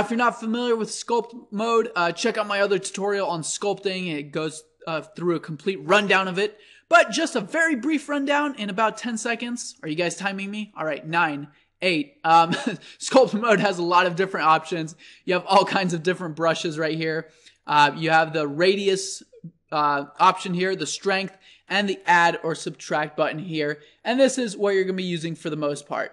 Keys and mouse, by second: 0.2 drag, 0.4-8.9 middle drag, 8.9-10.7 drag, 14.4-16.4 drag.